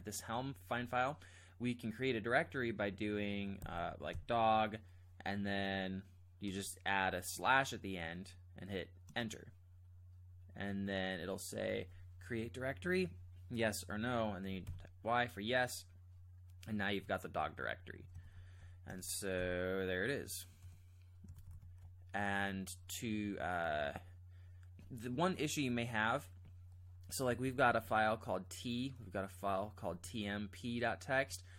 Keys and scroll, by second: 3.4-4.6 typing, 6.4 typing, 9.1 Return, 14.6 y, 18.2 ctrl+j, 18.9 Return, 19.3 g, 21.3 ctrl+j, 21.5 ctrl+j, 27.4 ctrl+j, 27.7 ctrl+j, 29.9 ctrl+j.